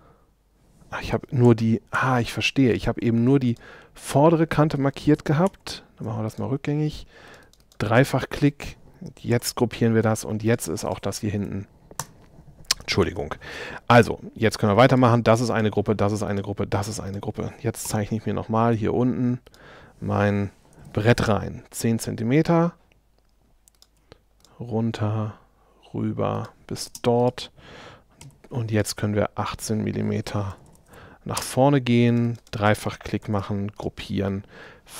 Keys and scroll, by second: 11.4 BackSpace, 14.0 shift+super+z, 17.9 l, 20.7 1, 26.9 space, 28.2 p, 30.1 l, 31.4 space.